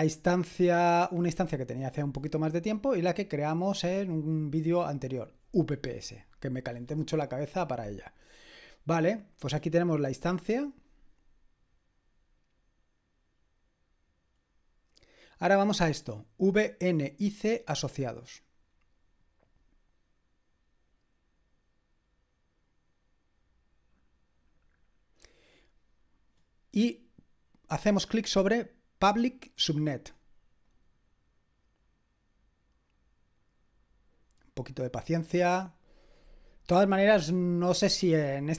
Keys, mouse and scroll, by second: 3.1 click, 9.5-10.3 scroll down 2, 10.3-12.1 scroll down 1, 13.1-13.9 scroll down 2, 17.5 click, 24.9-26.0 scroll down 2, 30.7 click.